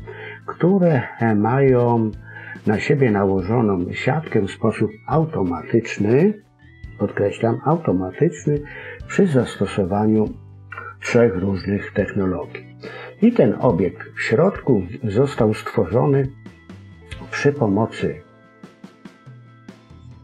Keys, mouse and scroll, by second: 1.0-1.7 scroll up 3, 1.7 scroll down 3, 2.0 scroll up 1, 2.1 middle click, 3.5-4.8 scroll up 1, 14.2 click, 15.1-16.0 scroll up 4, 16.1-16.7 scroll down 2, 16.6-17.2 scroll up 2, 17.2 scroll down 2.